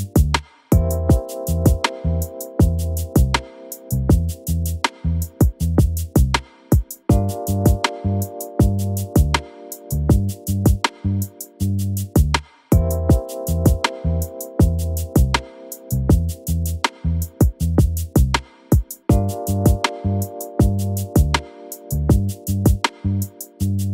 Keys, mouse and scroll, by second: 0.2 click, 0.8 click, 1.3 click, 1.5 shift+click, 2.4 click, 3.1 shift+click, 3.4 KP_1, 3.9 v, 4.8 Escape, 5.1 click, 5.4 click, 6.2 v, 6.9 KP_1, 8.0 click, 8.5 v, 9.3 click, 9.7 click, 10.2 click, 10.4 v, 11.4 click, 11.7 click, 12.4 g, 13.7 KP_1, 14.3 click, 16.4 g, 22.3 click, 23.3 click.